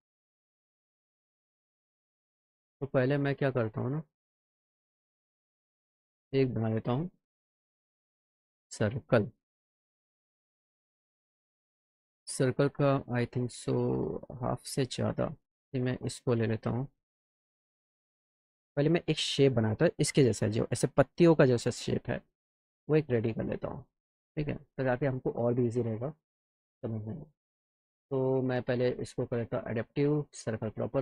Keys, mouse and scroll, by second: 2.2 click, 3.1 click, 6.3 click, 7.5 click, 9.0 click, 18.3 middle click, 22.3 middle click, 23.0 middle click, 26.4 click, 29.1 click, 29.8 click.